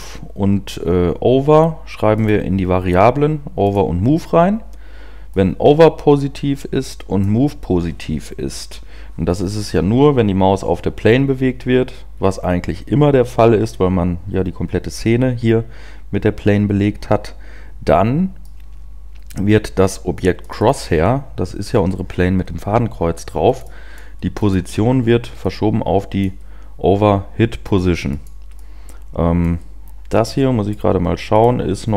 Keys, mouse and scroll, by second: 12.1 scroll down 1, 12.6-13.0 scroll down 1, 13.0 scroll up 1, 21.0 click.